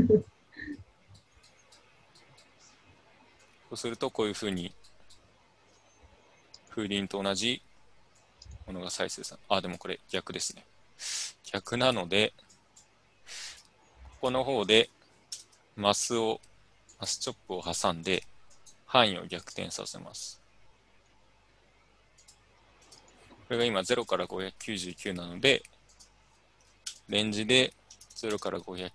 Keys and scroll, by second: 15.1-15.9 typing, 27.1-28.9 typing.